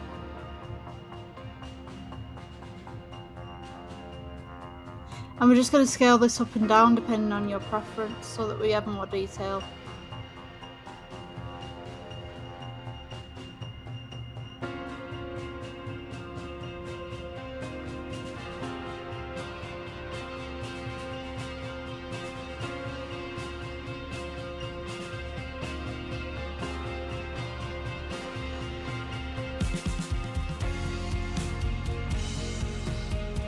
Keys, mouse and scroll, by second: 3.0 click, 3.7-4.3 scroll down 4, 4.3-6.5 shift+middle drag, 6.5-10.0 drag.